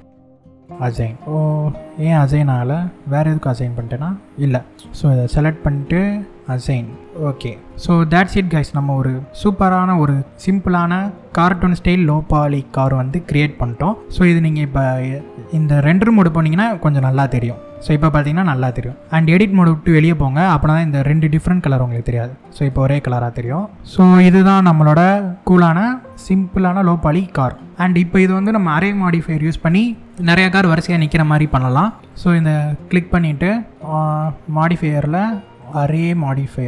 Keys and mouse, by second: 2.1-4.0 middle drag, 6.3 click, 6.6 click, 7.0 middle click, 7.7-9.5 middle drag, 11.4 middle click, 15.5 click, 16.7 shift+middle click, 17.7 middle click, 21.4 Tab, 23.4-27.1 middle drag, 34.3 click, 35.5 click.